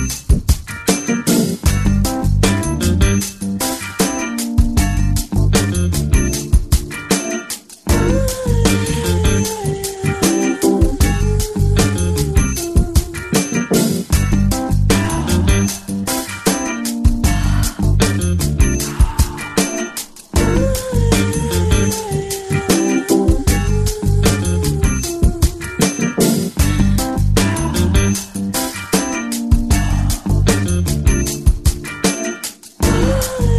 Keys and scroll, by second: 13.3 ctrl+j, 14.5 ctrl+t, 23.3 Return, 26.0 b.